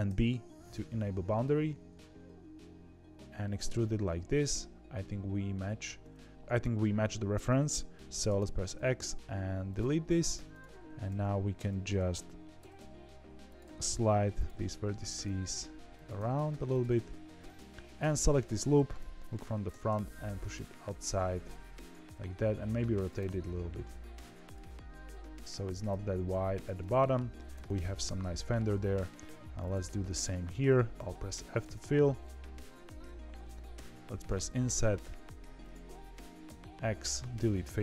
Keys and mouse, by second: 3.6 z, 8.2 x, 10.3 1, 10.8 h, 11.0 h, 11.6 ctrl+z, 12.5 g, 13.6 g, 14.9 click, 16.1 g, 18.9 KP_1, 19.6 g, 22.1 r, 23.1 g, 24.5 r, 25.8 g, 26.7 middle click, 27.5 z, 27.6 middle click, 28.7 shift+middle click, 29.2 2, 30.9 f, 31.5 KP_3, 32.2 shift+middle click, 33.7 i, 36.4 x, 37.5 1.